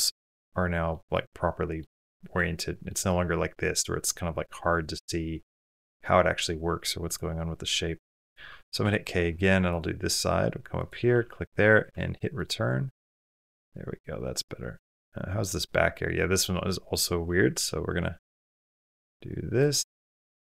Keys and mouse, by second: 0.9 middle click, 2.1 middle click, 2.9 middle click, 4.2-6.3 middle drag, 7.9 middle click, 8.6 k, 12.1 middle click, 13.1-16.7 middle drag, 17.4 k.